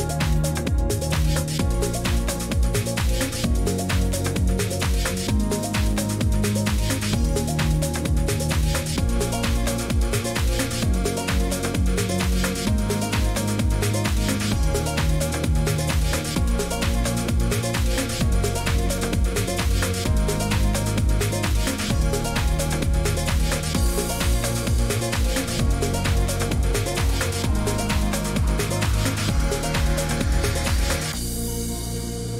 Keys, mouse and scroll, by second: 0.7 click, 1.3 click, 2.9-4.1 typing, 10.3 click, 11.6 click, 13.6 click, 15.0 click.